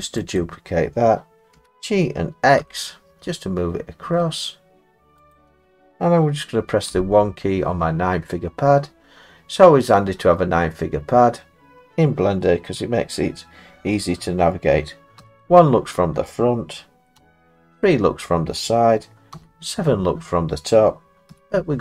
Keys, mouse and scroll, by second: 0.4 click, 1.6 g, 2.6 x, 5.3 click, 6.9 1, 9.3 scroll, 9.3 middle click, 9.4 middle click, 10.0 middle click, 11.3 middle click, 15.2 1, 17.2 3, 19.3 7, 21.3 1.